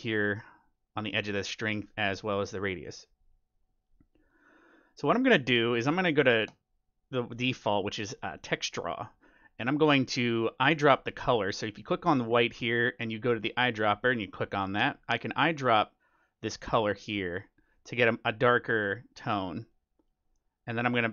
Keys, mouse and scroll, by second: 4.2-6.1 drag, 10.4-13.9 drag, 19.6-21.1 drag.